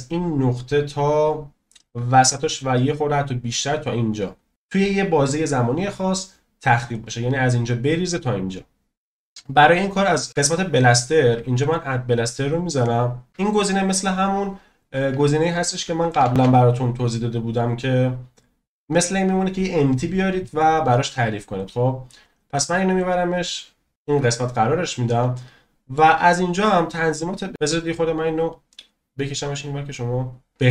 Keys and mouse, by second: 4.5-5.0 drag, 10.1 click, 11.7-13.7 drag, 16.1 shift+a, 25.3-25.9 shift+middle drag, 28.5 click.